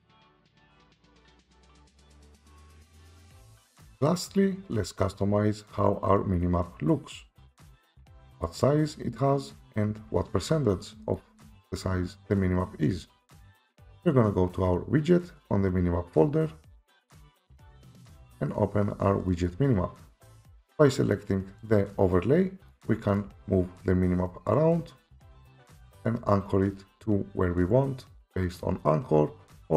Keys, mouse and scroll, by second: 0.0-0.5 typing, 4.0 F5, 4.0 F4, 4.2 Escape, 8.1 click, 11.2 click, 17.0 click, 17.2 click, 19.3 click, 19.5 click, 21.7 click, 23.2 right click, 26.0 click.